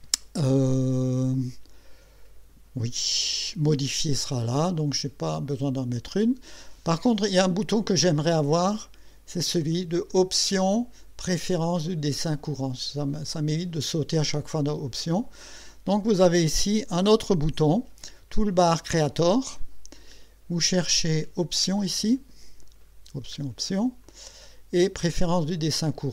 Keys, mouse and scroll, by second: 10.1 click, 13.5 click, 19.0 click, 20.9 click, 22.4-23.0 scroll down 4, 24.0 click, 25.3 click.